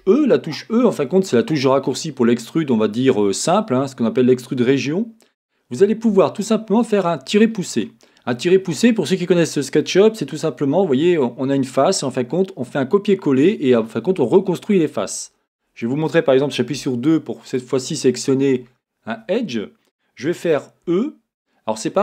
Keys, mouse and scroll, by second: 14.7-17.5 middle drag, 17.5 click, 17.9-22.0 middle drag, 20.8 e.